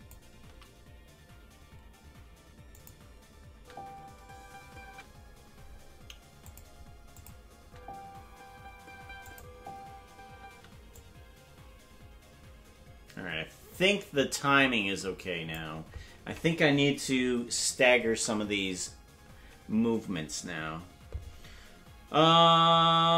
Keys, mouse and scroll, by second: 0.4 s, 3.5 space, 6.4 click, 6.4 space, 7.1 click, 7.6 space, 9.3 click, 10.4 space, 11.0-15.6 drag.